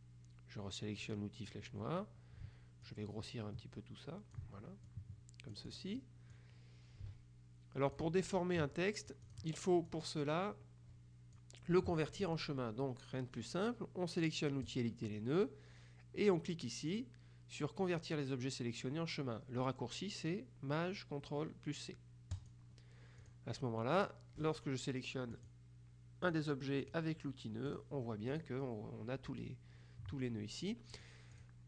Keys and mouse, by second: 1.1 click, 2.9-6.3 ctrl+drag, 7.1 ctrl+click, 9.3 click, 14.7 click, 22.4 click, 23.3 click, 25.5 click, 26.4 click, 27.8 click, 31.1 click.